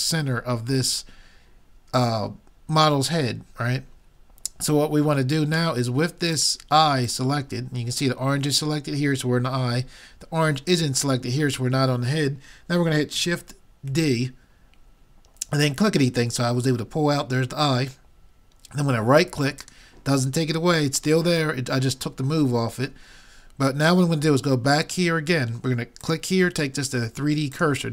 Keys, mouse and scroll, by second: 6.4-8.9 drag, 13.9 shift+d, 26.0-27.8 drag.